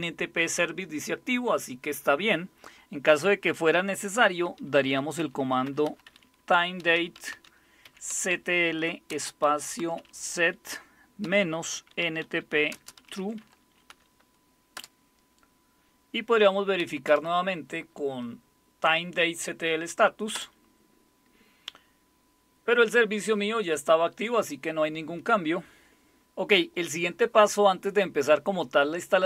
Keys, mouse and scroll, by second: 5.3-14.4 typing, 14.7 Return, 16.5-17.6 typing, 20.3 Return.